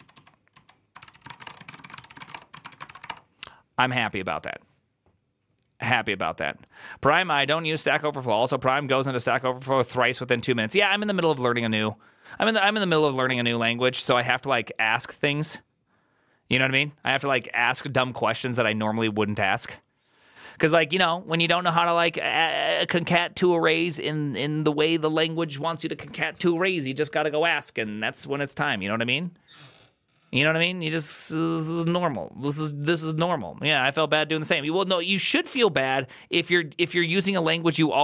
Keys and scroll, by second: 0.0-3.4 typing, 0.8 ctrl+c, 35.5 alt++.